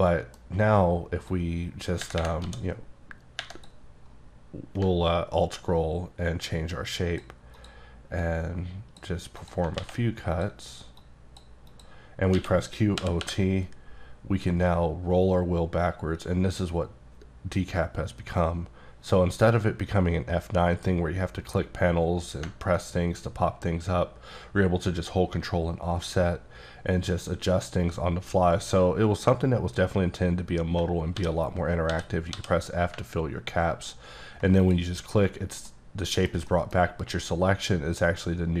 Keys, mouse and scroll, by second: 0.0 middle click, 0.5 scroll up 1, 1.3 click, 2.4 d, 4.9-5.5 alt+scroll down 2, 5.5-6.0 alt+scroll up 2, 6.0-6.7 alt+scroll down 2, 6.7 click, 7.6 click, 8.2 click, 9.4 click, 9.8 alt+x, 10.3 click, 11.0 click, 11.7 click, 12.3-13.2 typing, 14.6-16.4 scroll down 1, 31.2 f, 31.9 f, 32.3 f, 34.6 ctrl+click, 35.1-35.7 scroll down 1, 36.0 middle click, 36.5 middle click.